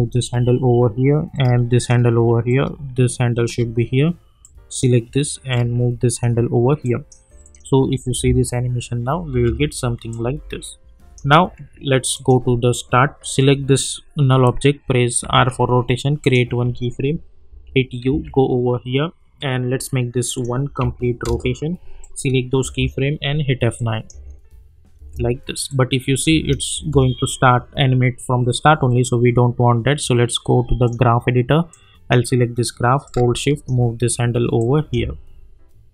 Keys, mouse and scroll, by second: 2.4-6.8 drag, 8.1 space, 10.1-12.1 drag, 15.2 r, 16.2 click, 17.5 u, 18.1 k, 20.3 click, 21.2 Return, 22.0 click, 22.6 F9, 23.7 click, 24.1 space, 25.7 click, 26.3 space, 30.8-34.6 drag, 34.6 click, 35.0 space.